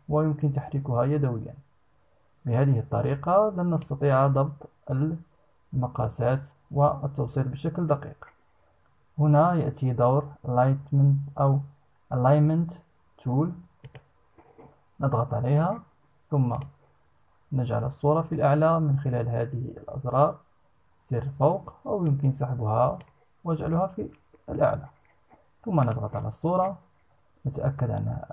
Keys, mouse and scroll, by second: 13.4 click, 16.0 click, 21.6-22.8 drag, 25.3 click.